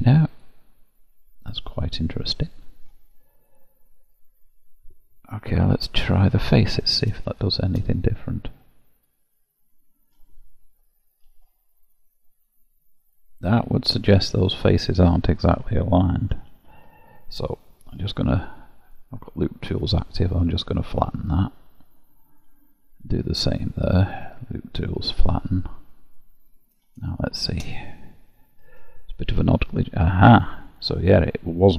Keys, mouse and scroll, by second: 0.3 click, 1.5 middle click, 3.7 click, 5.8 3, 6.0 click, 6.4 middle click, 7.3 shift+click, 8.0 middle click, 11.2 ctrl+b, 16.6 ctrl+z, 17.9 3, 18.1 click, 18.9 right click, 21.9 middle click, 22.9 click, 23.4 right click, 26.2 middle click, 27.2 shift+click, 28.6 ctrl+b, 31.2 middle click.